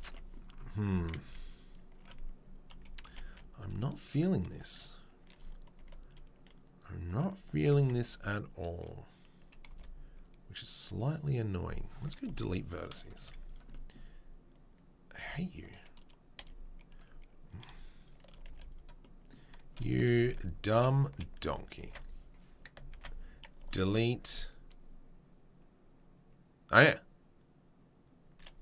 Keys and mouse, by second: 0.0 Tab, 0.0-4.4 middle drag, 0.7 1, 1.2 z, 2.7 KP_3, 3.0 KP_1, 4.4 click, 4.5-28.6 middle drag, 5.7 1, 7.7 1, 9.7 b, 12.2 Delete, 13.2 z, 15.2 2, 16.4 f, 18.4 f, 20.1 ctrl+z, 20.3 ctrl+z, 20.7 ctrl+z, 21.4 ctrl+z, 22.9 ctrl+z, 23.6 Delete.